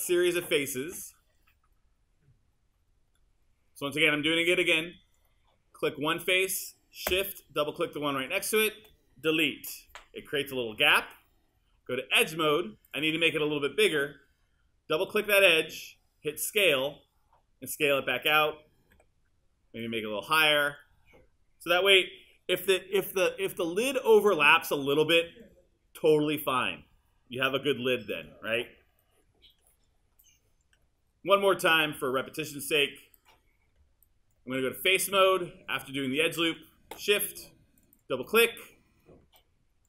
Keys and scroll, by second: 9.6 BackSpace, 19.0 w, 23.2 r.